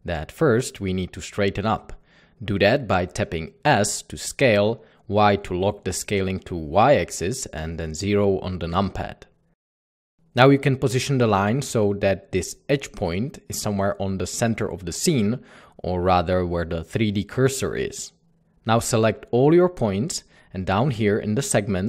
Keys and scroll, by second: 0.1 s, 3.1 s, 7.1 typing, 10.5 typing, 11.9 Tab, 12.4-13.0 typing, 21.3 typing.